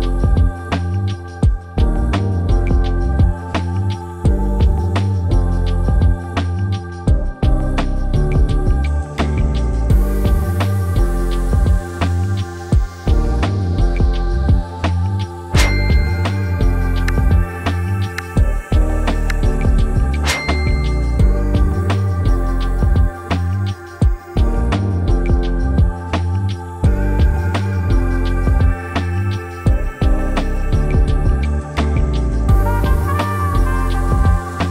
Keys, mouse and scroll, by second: 3.6-4.5 typing, 7.4-18.6 drag, 19.5-21.5 drag, 33.9-34.7 typing, 34.2 Tab.